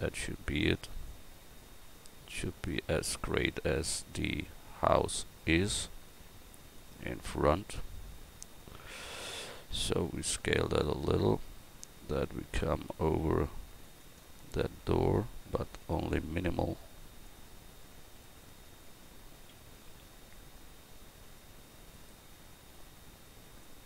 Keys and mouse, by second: 8.4-14.3 middle drag.